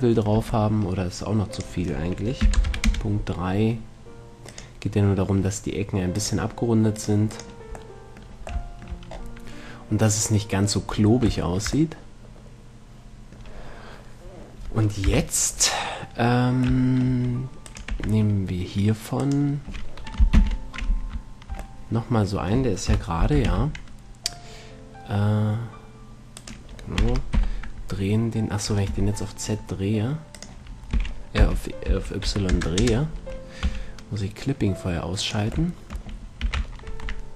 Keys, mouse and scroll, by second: 0.0 Tab, 0.6 Tab, 1.9-3.6 drag, 4.8-9.5 drag, 8.2-15.4 middle drag, 15.4 KP_1, 17.1 middle click, 18.0-20.0 drag, 18.2 Tab, 20.6 ctrl+l, 23.2 KP_1, 23.8 shift+d, 26.8-28.6 right drag, 27.3 r, 30.6-32.6 drag, 30.8 i, 31.2 r, 33.9 g, 36.0-37.3 drag, 36.7 s.